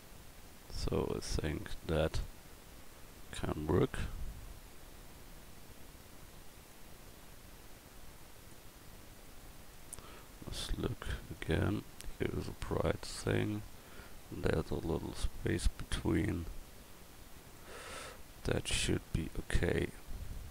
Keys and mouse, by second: 1.3 click, 6.7-9.8 drag, 13.4-14.7 middle drag.